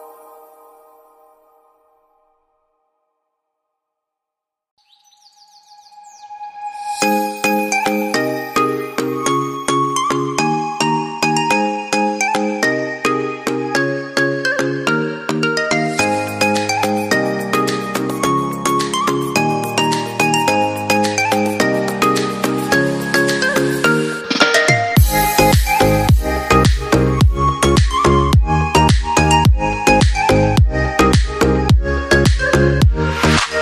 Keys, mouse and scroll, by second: 7.4 shift+Page_Up, 10.0 double click, 17.8 double click, 24.2 right click, 25.9 ctrl+Left.